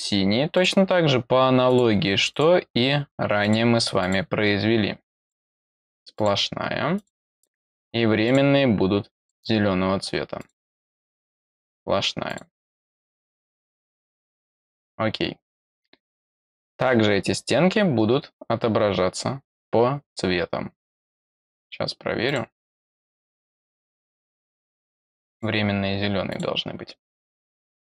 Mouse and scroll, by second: 0.5 click, 1.6 click, 2.3 click, 3.4 click, 3.9 click, 5.2 click, 5.6 click, 6.1 click, 6.9 click, 7.3 click, 8.2 click, 9.1 click, 10.3 click, 11.5 click, 12.2 click, 14.2 click, 22.2 click, 23.2 click, 23.6 click, 24.8 click, 25.3 click, 26.2 click, 27.2 click.